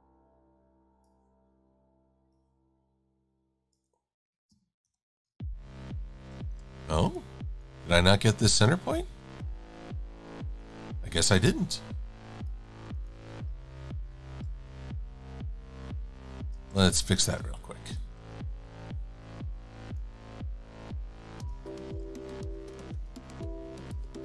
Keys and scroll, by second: 4.9 shift+super+[, 6.4-7.3 typing, 13.5 shift+x, 14.3 shift+super+a, 15.3 v, 16.6 shift+super+a, 16.9 v, 17.4 shift+x, 18.0 shift+super+a, 21.9 shift+super+a.